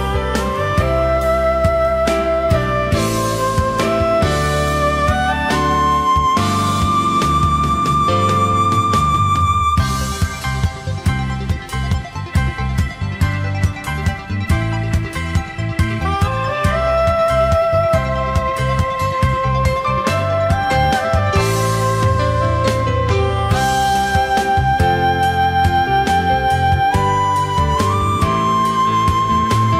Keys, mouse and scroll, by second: 0.4 shift+click, 7.6 ctrl+shift+a, 9.2 space, 12.9 space, 15.8 alt+scroll down 1, 16.3 space, 22.7 alt+scroll down 1, 24.5 space, 25.3 alt+scroll up 1, 27.5 space.